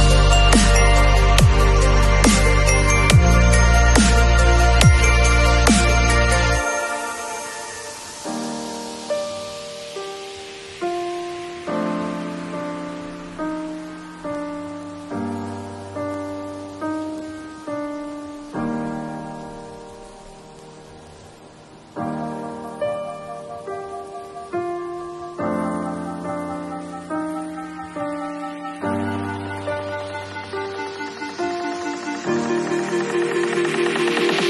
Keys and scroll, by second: 8.3 alt+super+t, 17.0 e, 18.9 b, 19.4 ], 21.9 0, 22.7 [.